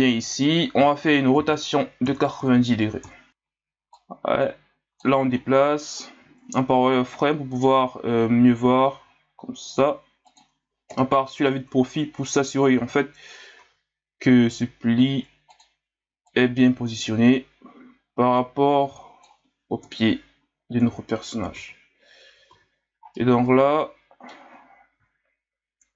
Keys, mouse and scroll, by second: 0.9-1.4 scroll down 3, 1.4 r, 3.3-3.9 scroll down 1, 3.9-5.4 drag, 5.4 scroll down 1, 5.9 scroll up 1, 6.2 z, 6.6 ctrl+scroll up 2, 8.9 s, 10.9 KP_3, 11.9-12.5 scroll up 1, 13.6 s, 16.3-19.3 drag, 19.8 KP_1, 20.8 z, 21.5 a, 22.2 Tab, 22.5 a, 22.7 scroll down 4, 23.1-25.9 middle drag.